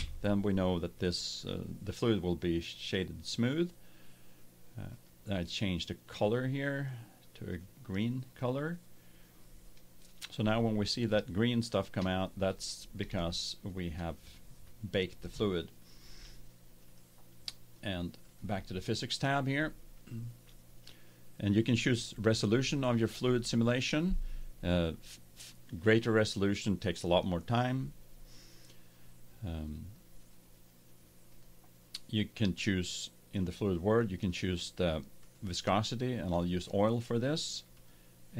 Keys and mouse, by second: 4.9-8.1 drag, 8.3-10.2 drag, 10.5-12.7 middle drag, 13.2-15.1 middle drag, 16.8-20.0 drag, 18.2 right click, 26.7-31.2 middle drag, 31.2-33.1 drag, 34.1-36.1 drag, 37.7-38.3 drag.